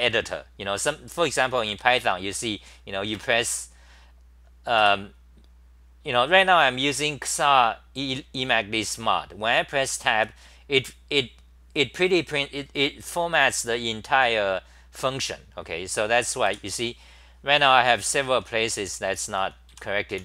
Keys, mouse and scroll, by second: 1.4 t, 1.7 ,, 3.1 Tab, 3.7-4.8 scroll, 4.8 f, 10.1 Tab, 16.5 f, 17.6-20.2 typing.